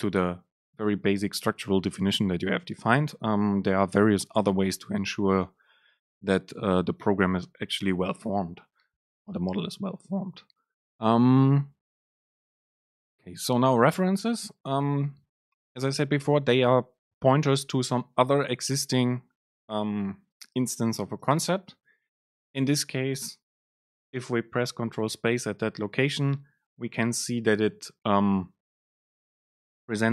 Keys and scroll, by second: 21.2 super+space.